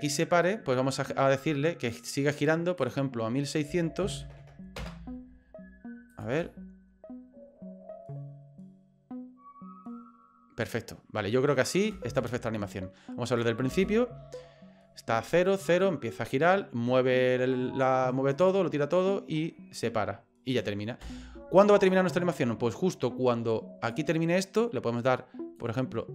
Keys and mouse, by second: 2.8-5.1 drag, 4.4 KP_0, 6.1 click, 6.4 space, 11.9 space, 12.2-13.4 drag, 13.7 space, 18.3 right click, 18.3 click, 21.0 space, 21.9-23.9 drag, 25.6-26.1 drag.